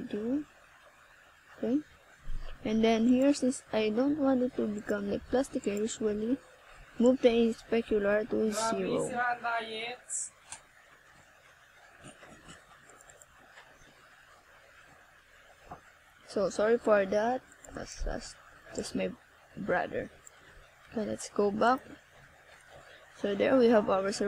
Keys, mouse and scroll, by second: 4.3-4.8 scroll down 1, 5.5 click, 7.7 click, 12.0 click, 13.0 click, 13.8 click, 14.6 click, 18.1 click.